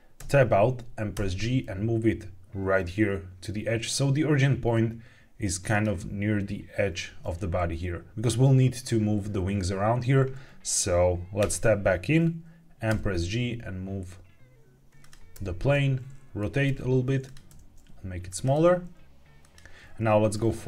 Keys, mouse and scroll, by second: 0.1 Tab, 1.0 g, 5.6 click, 7.3 g, 8.1 click, 11.3 Tab, 12.8 g, 14.9 click, 15.2 r, 16.3 click, 16.6 g, 17.2 click, 17.4 s, 18.2 click, 18.5 g, 19.3 click.